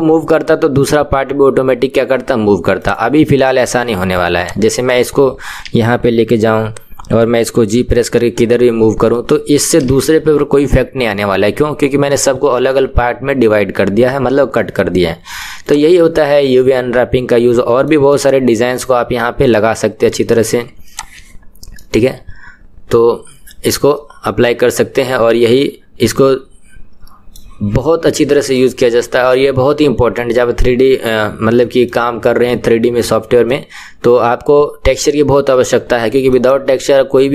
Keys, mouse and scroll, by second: 2.9 click, 3.9 Tab, 4.5 click, 7.6 g, 14.6-15.7 middle drag, 15.7 click, 16.3-20.1 middle drag, 20.1 Tab, 21.0 click, 21.8-24.8 middle drag, 28.6-37.3 middle drag.